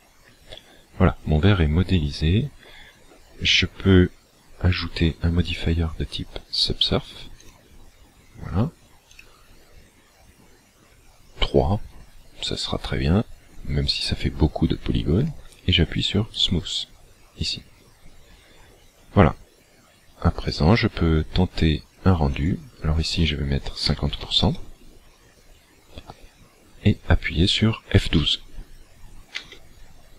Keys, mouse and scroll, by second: 5.4 click, 9.1 click, 16.3 click, 20.4 click, 22.4 click, 29.9 F12.